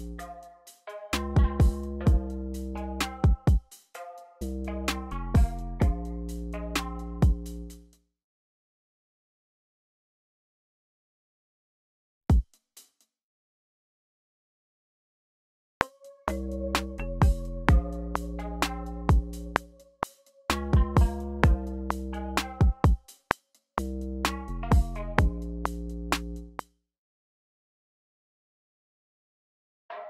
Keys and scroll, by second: 7.5 space, 11.7 BackSpace, 12.2 space, 12.5 space, 14.2 super+z, 15.6 r, 26.1 space, 27.3 super+a, 27.4 q, 29.3 super+z.